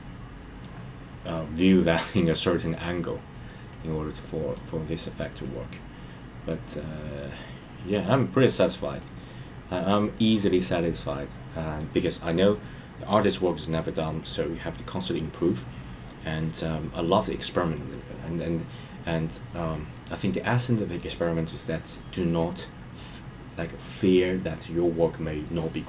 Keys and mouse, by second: 3.6 middle click, 5.4-8.7 middle drag, 9.0-10.5 middle drag.